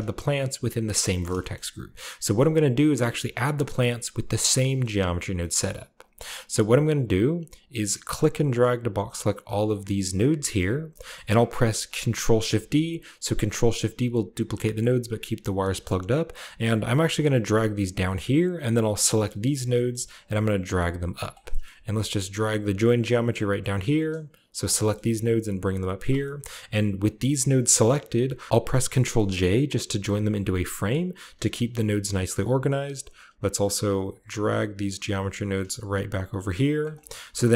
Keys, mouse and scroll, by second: 1.0-1.7 scroll up 2, 1.2 middle click, 1.4 middle click, 1.7-3.3 scroll down 2, 2.3-3.5 middle drag, 3.5-4.6 drag, 4.6 middle click, 5.1-5.8 scroll down 2, 5.4-7.3 middle drag, 5.8-7.3 drag, 7.9-10.2 drag, 10.6-11.7 scroll down 1, 10.7-12.9 middle drag, 11.7 scroll down 2, 11.8 ctrl+shift+d, 17.8-21.1 drag, 20.1 g, 21.1 middle click, 21.2-22.2 drag, 21.6 a, 22.2-23.3 middle drag, 23.3 click, 23.8 middle click, 24.5-25.8 drag, 24.8 typing, 25.8-28.5 drag, 26.5 typing, 28.5 ctrl+j, 29.2-30.7 middle drag, 29.7-30.7 scroll up 1, 30.7 click, 30.9-31.4 scroll down 1, 31.4 click, 31.8 g, 32.2 click, 32.2 middle drag, 32.3-33.6 drag, 32.6 g, 33.1 middle click, 34.0 middle click, 34.3 middle click, 34.9 g, 35.9 click, 36.2 click, 36.2 a, 36.6-37.5 drag.